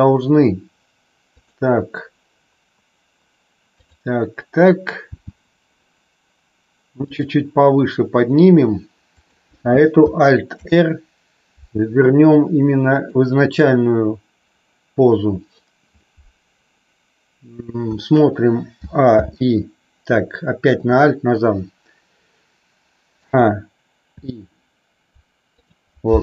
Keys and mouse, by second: 5.1 g, 7.0 click, 9.1 click, 10.5 alt+r, 19.0 alt+i, 23.1 a, 24.0 i.